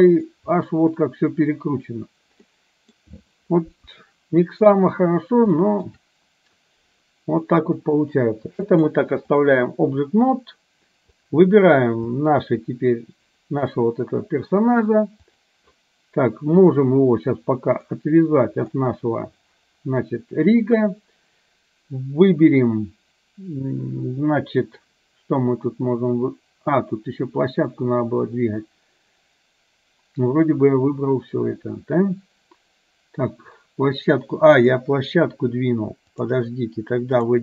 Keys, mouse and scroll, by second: 2.5-4.0 middle drag, 4.0 KP_1, 5.7 shift+middle click, 8.8-9.6 drag, 11.3 click, 15.4 click, 16.8 drag, 17.8 click, 36.1-37.4 drag.